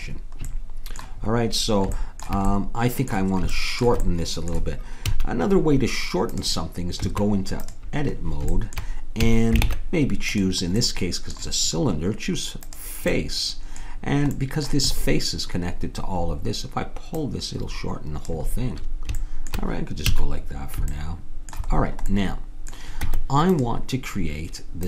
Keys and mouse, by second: 5.1 a, 6.4-8.1 drag, 7.0 Tab, 9.2 a, 9.7 ctrl+Tab, 12.6-14.2 drag, 17.2-18.8 drag, 20.1 a, 23.0 Tab.